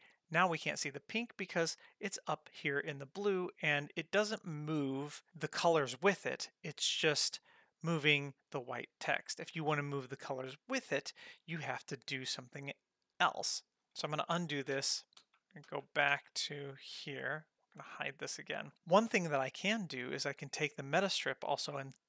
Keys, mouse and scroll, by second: 3.9 click, 10.7 click, 12.7 click, 14.4 ctrl+z, 14.8 ctrl+z, 15.2 ctrl+z, 15.7 ctrl+z, 16.1 ctrl+z, 17.8 h, 19.9 click.